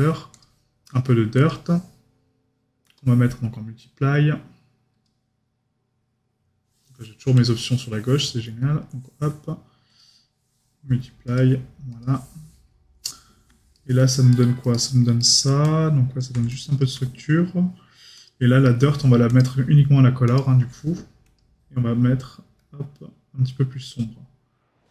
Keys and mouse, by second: 13.7 right click, 18.6 right click.